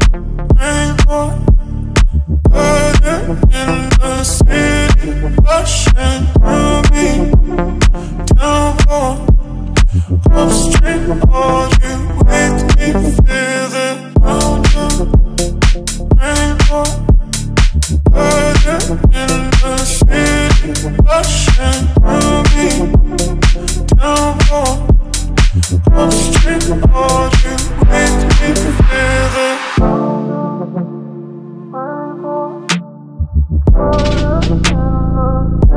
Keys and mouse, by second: 0.1-0.4 ctrl+middle drag, 0.7-1.0 middle drag, 1.3 shift+middle drag, 1.7-2.0 ctrl+middle drag, 4.2 click, 4.6 click, 4.8 click, 5.0 click, 5.4 click, 5.7 click, 7.2 click, 8.0 middle click, 8.8 middle click, 9.2 middle click, 10.2 ctrl+middle drag, 10.4 shift+middle drag, 10.8-11.2 middle drag, 11.4 ctrl+middle drag, 11.8 shift+middle drag, 12.1 middle click, 12.5 shift+middle click, 13.7 middle click, 19.6 click, 20.9-22.1 drag, 27.2 middle click, 30.3 click, 30.7 click, 31.9 click, 33.0 KP_Decimal, 34.1 click, 34.6 KP_Decimal, 35.4 ctrl+middle click.